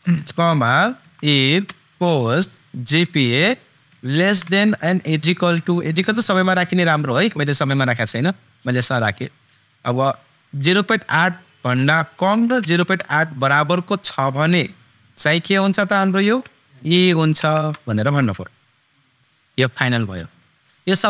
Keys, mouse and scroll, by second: 1.0 super+i, 1.2 super+f, 1.8 shift+super+9, 2.9 click, 4.1 ,, 5.2 super+-, 16.7 shift+super+e.